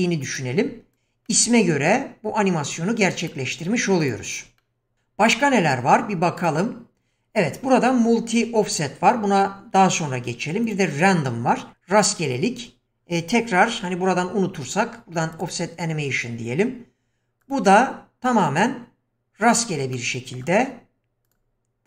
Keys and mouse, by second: 1.3-1.6 middle drag, 3.2 click, 4.0 click, 4.6-5.6 middle drag, 6.4-10.7 drag, 14.6 q, 17.5 click, 19.5 click, 19.9-20.4 middle drag, 21.3 click.